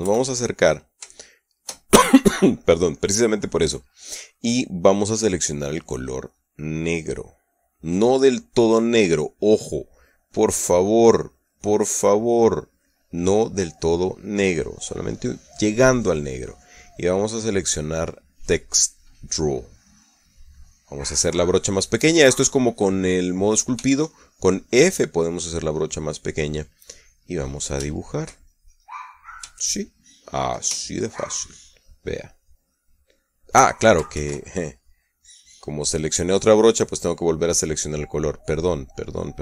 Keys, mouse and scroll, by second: 0.5 KP_Add, 1.8 shift+click, 2.6 shift+middle click, 7.2-10.3 drag, 11.0-13.1 drag, 17.6 click, 20.6 click, 24.5 f, 26.8 click, 28.6-31.2 shift+middle drag, 31.6-32.0 shift+middle drag, 32.9 click, 33.3 click, 34.9 ctrl+z, 36.0-39.4 drag.